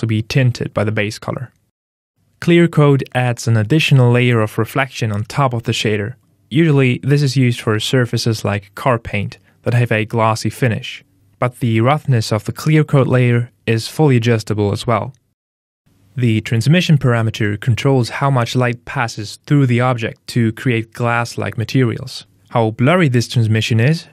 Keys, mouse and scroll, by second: 2.1 click, 6.1 click, 11.9 click, 15.8 click, 21.7 click.